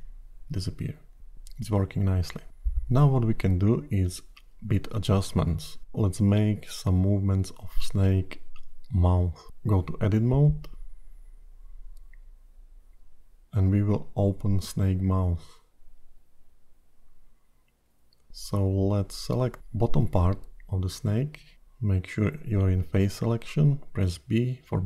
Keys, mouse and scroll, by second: 2.0 click, 3.0 click, 3.5 middle click, 4.6 scroll up 2, 5.1-5.5 scroll down 2, 8.2 click, 9.9 Tab, 9.9-10.5 scroll up 5, 10.5 middle click, 11.8-12.3 scroll up 4, 12.6-13.1 scroll down 3, 13.1-13.5 scroll up 2, 15.7 middle click, 17.9 KP_1, 18.8 shift+z, 20.0 alt+a, 22.4 3, 23.7 b.